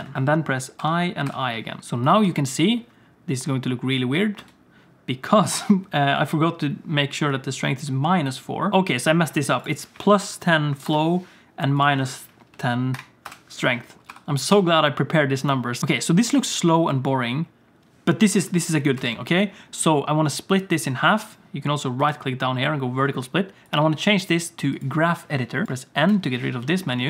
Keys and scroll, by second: 0.8 i, 1.2 i, 2.2 space, 4.4 space, 14.1 i, 14.5 i, 15.8 space, 16.3 space, 19.0 space, 26.1 n.